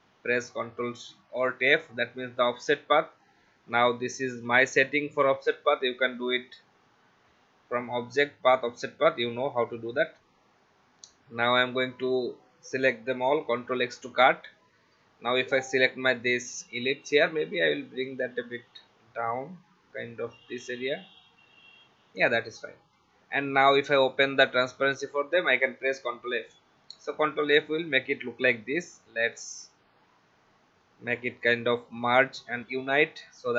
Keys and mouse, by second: 1.6 click, 2.7 click, 9.6 click, 13.7 ctrl+x, 16.1 click, 19.0 Down, 20.8 Left, 24.0 click, 26.0 ctrl+f, 31.8 click.